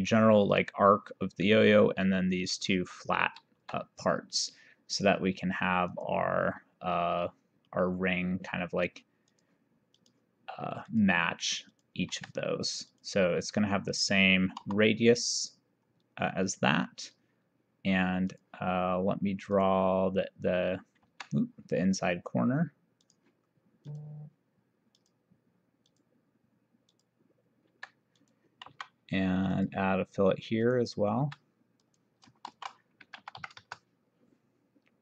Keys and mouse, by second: 3.7 Escape, 6.0 click, 9.4 click, 12.2 Escape, 13.0 click, 14.7 e, 18.4 click, 19.6 click, 21.1 Escape, 23.0 click, 26.6 click, 27.8 Escape, 28.2 click, 28.8 v, 29.6 click, 30.7 click, 31.2 Escape, 31.9 click, 32.5 shift+r, 33.2 KP_2, 33.4 KP_5.